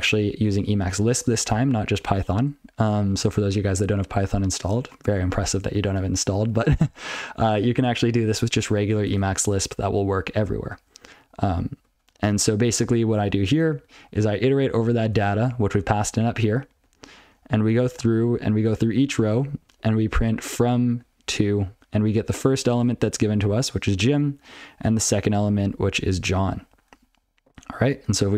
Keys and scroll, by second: 0.2 ctrl+alt+f, 0.5 ctrl+alt+f, 0.7 ctrl+alt+f, 1.2 ctrl+alt+b, 2.3 ctrl+n, 3.2 ctrl+alt+b, 5.2 ctrl+n, 7.3 ctrl+b, 7.5 ctrl+b, 8.6 ctrl+alt+f, 9.1 ctrl+alt+f, 10.7 ctrl+a, 11.0 ctrl+f, 11.6 ctrl+f, 11.8 ctrl+f, 12.8 ctrl+alt+f, 13.1 ctrl+n, 13.2 ctrl+alt+f, 13.8 ctrl+n, 14.1 ctrl+n, 14.5 ctrl+b, 15.2 ctrl+alt+f, 15.5 ctrl+p, 15.7 ctrl+p, 15.8-16.1 ctrl+f, 22.2 ctrl+n, 22.3 ctrl+alt+b, 22.5 ctrl+alt+b, 27.8 ctrl+n, 28.1 ctrl+p.